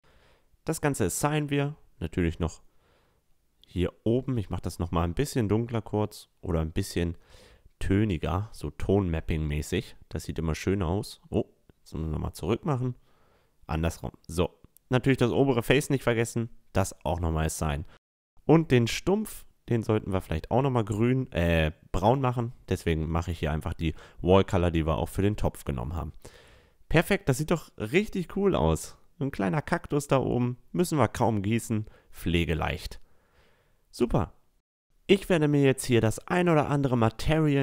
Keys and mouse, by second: 1.0-2.7 drag, 2.7 Tab, 4.4-6.1 drag, 7.9-9.7 drag, 11.9 ctrl+z, 12.9-14.6 drag, 15.3 Tab, 15.7-18.5 right drag, 16.4-18.8 drag, 17.4-18.5 middle drag, 17.8 Tab, 18.1 Tab, 18.6 middle click, 18.6 right click, 19.0 middle click, 19.2 middle click, 19.8-20.8 drag, 20.8-23.3 right drag, 20.9 a, 22.5-24.7 drag, 23.6 Tab, 25.3 Tab, 25.7 Tab, 26.1 a, 26.3-28.9 middle drag, 28.5-30.0 right drag, 29.7 middle click, 30.0 drag, 30.0-31.7 middle drag, 32.1-37.6 middle drag, 34.5 a.